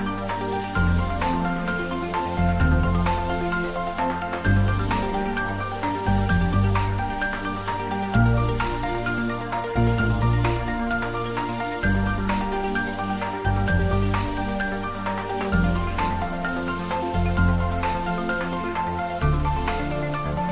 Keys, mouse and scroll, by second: 0.0 click, 0.5 Tab, 1.6 ctrl+r, 1.8 click, 2.3 Tab, 2.8 middle click, 3.5 middle click, 4.1 Tab, 4.7 ctrl+r, 5.3 click, 5.4 click, 6.0 Tab, 6.2 middle click, 7.0 Tab, 7.8 ctrl+r, 8.3 click, 8.9 Tab, 9.2 middle click, 9.8 Tab, 10.4 ctrl+r, 11.1 click, 11.9 Tab, 12.2 ctrl+middle click, 12.5 middle click, 13.2 Tab, 13.3 middle click, 13.9 3, 14.5 click, 15.1 click, 15.3 shift+click, 15.8 click, 16.1 middle click, 16.6 shift+click, 17.3 g, 18.0 click, 18.3 ctrl+z, 18.6 middle click, 18.9 Tab, 19.1 middle click, 19.3 Tab, 19.6 middle click, 19.7 middle click, 20.2 Tab.